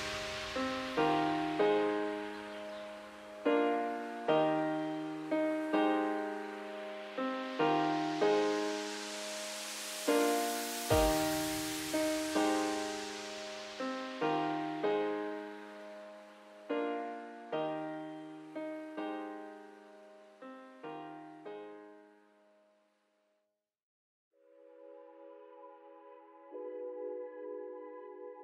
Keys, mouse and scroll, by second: 0.6 ctrl+z, 1.2 alt+shift+click, 1.9 alt+shift+click, 2.4 alt+shift+click, 2.9 alt+shift+click, 3.3-4.8 middle drag, 4.8-5.4 scroll up 1, 5.4 middle click, 6.3 ctrl+b, 11.9-13.0 middle drag, 13.0 scroll up 1, 13.2 alt+e, 22.7 Tab, 22.9 scroll down 1, 23.1-23.9 middle drag, 23.9-25.0 scroll up 1, 25.0 middle drag, 25.2 Tab, 25.8 ctrl+r, 27.2 ctrl+z, 27.4 ctrl+z, 27.5 ctrl+z, 27.8 ctrl+z.